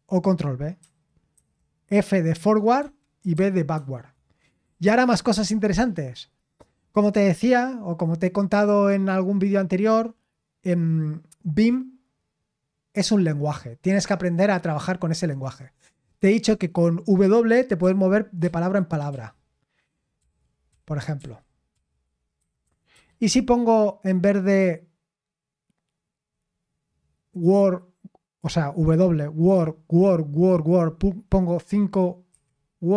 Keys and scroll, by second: 0.8 ctrl+b, 1.3 ctrl+b, 2.3 ctrl+f, 3.0-3.8 typing, 17.8-20.6 typing, 22.3-23.2 typing, 32.3-32.9 typing.